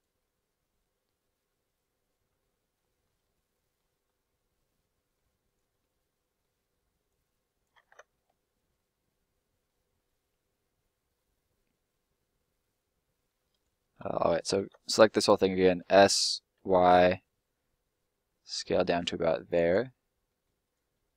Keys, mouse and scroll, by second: 0.1 middle click, 2.9 scroll up 1, 3.0 middle click, 3.9-4.4 scroll up 1, 4.4 middle click, 5.4 right click, 5.7 middle click, 7.0 click, 7.7 ctrl+click, 7.8 ctrl+z, 8.1 middle click, 13.5 right click, 14.1 ctrl+right click, 14.5 ctrl+l, 15.6 s, 16.5 y, 19.5 click, 20.2 middle click, 20.6 right click.